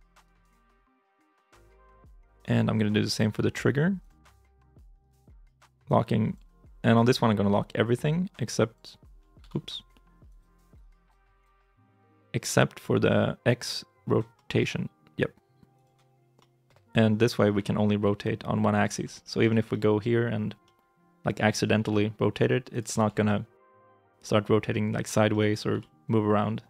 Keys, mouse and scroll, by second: 1.5 right click, 2.0 shift+middle click, 2.4 scroll up 1, 9.2 ctrl+z, 14.3-16.2 scroll, 16.2 middle click, 16.8-17.4 scroll up 2, 17.4 r, 18.8 ctrl+z, 19.0 middle click, 19.3 shift+middle click, 19.6 middle click, 20.2 scroll down 1, 20.5 middle click, 21.7 r, 22.8 ctrl+z, 23.1 middle click, 25.6 g.